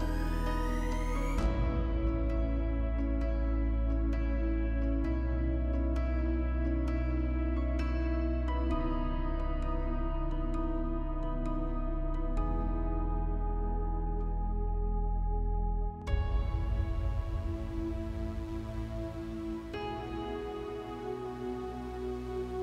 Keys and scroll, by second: 7.9 space.